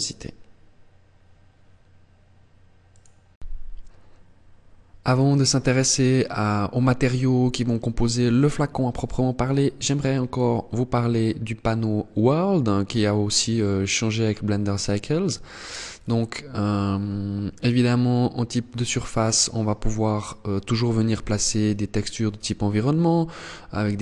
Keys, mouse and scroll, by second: 9.8 click, 15.5 click, 19.7 click.